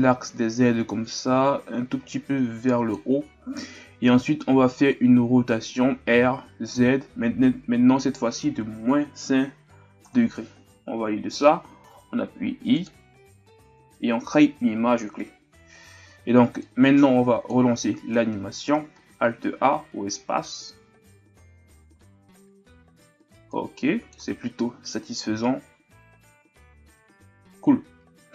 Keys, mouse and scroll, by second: 18.1-18.9 scroll down 3, 18.9 alt+a, 20.8-21.9 scroll down 1, 21.9 alt+a, 22.3-23.5 scroll up 3, 23.5-27.2 drag.